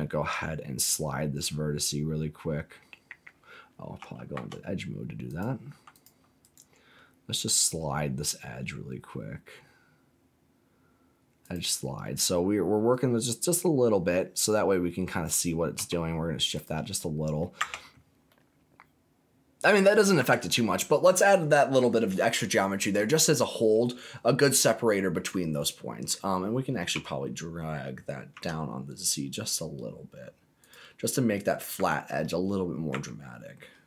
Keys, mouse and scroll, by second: 3.9 3, 4.3 2, 5.2 click, 5.9 alt+click, 6.4-15.2 right drag, 15.7 g, 16.5 click, 16.9 middle click, 17.6 Tab, 18.2-19.9 middle drag, 20.1 Tab, 20.5 scroll down 2, 21.0 middle click, 23.4 scroll up 2, 25.3 middle click, 26.8 g, 28.3 z, 30.6 click, 31.0 middle click, 31.7 Tab, 32.2 middle click, 32.9 Tab, 33.3-33.8 scroll up 2.